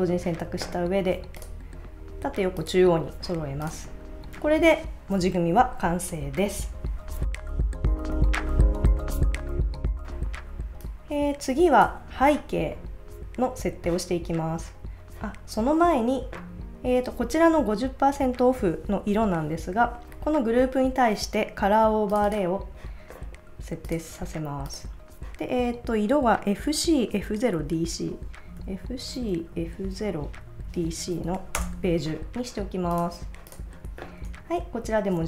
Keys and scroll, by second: 4.4 super+s, 28.5-30.9 typing, 31.6 Return, 34.3 super+s.